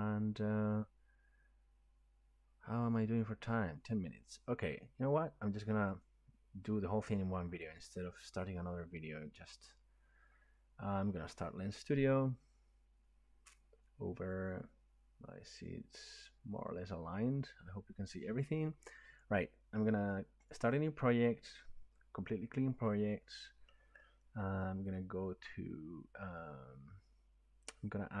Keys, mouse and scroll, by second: 6.2-6.5 drag, 7.6 click, 9.8 click, 20.5 click, 25.3 click.